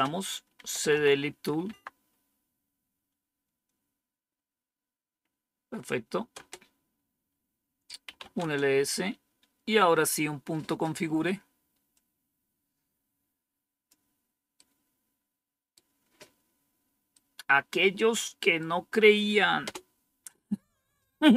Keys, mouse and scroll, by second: 0.0-1.4 typing, 1.6 Tab, 6.3 Return, 7.7-8.6 typing, 11.8-13.8 drag, 14.5-16.2 right drag, 17.1-19.0 right drag, 19.5 Return.